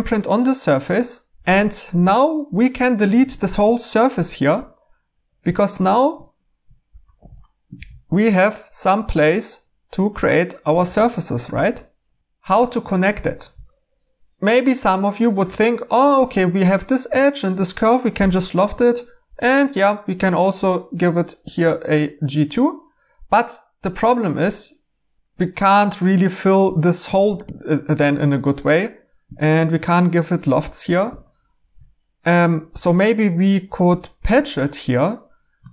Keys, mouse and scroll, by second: 1.4 3, 4.0 x, 5.4 2, 6.8-8.2 typing, 10.8 e, 12.2 Escape, 15.4 2, 18.1 1, 21.4-23.1 middle drag, 21.4-21.8 scroll, 31.0 Escape, 35.6 Tab.